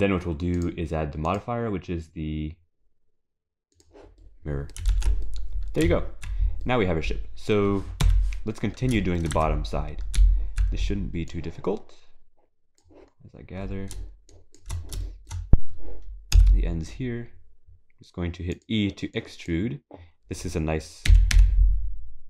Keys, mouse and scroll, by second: 0.6 click, 1.3 click, 4.2 middle click, 4.9 ctrl+s, 5.3 middle click, 5.8 z, 6.7 middle click, 8.0 KP_3, 9.0 shift+middle click, 9.3 Tab, 9.7-10.2 scroll up 5, 10.2 z, 11.3 click, 13.2-13.5 scroll down 3, 14.3 shift+click, 15.0 shift+middle click, 15.6-16.2 scroll up 3, 16.3 e, 19.2 click, 21.1 g.